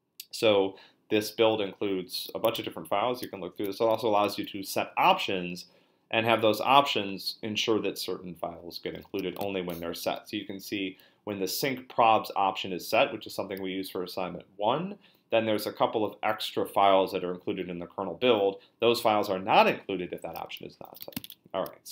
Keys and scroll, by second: 0.3 Up, 1.7 Down, 2.5 b, 3.2 ctrl+f, 9.4 shift+g, 10.1 Up, 10.3 Up, 10.5 Up, 10.6 Up, 10.7 Up, 21.2 Return, 21.2 q.